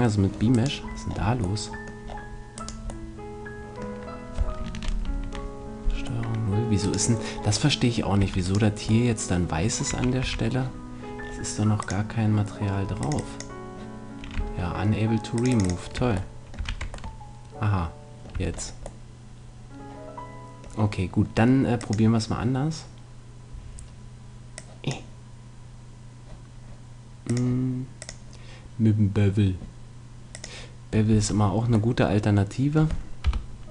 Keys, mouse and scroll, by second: 0.5-2.4 right drag, 2.6 right click, 3.2-5.0 middle drag, 5.0 ctrl+0, 6.2-7.4 middle drag, 8.2 a, 9.9 a, 10.2 a, 11.8-15.0 drag, 14.4 Tab, 15.4-16.4 drag, 16.0 Tab, 16.4 middle click, 16.6 a, 16.8 Tab, 18.3 Tab, 21.9-23.4 drag, 23.4 middle click, 24.6-26.3 drag, 27.3-29.7 drag, 31.1 Tab, 31.4-33.2 middle drag, 33.2 KP_1.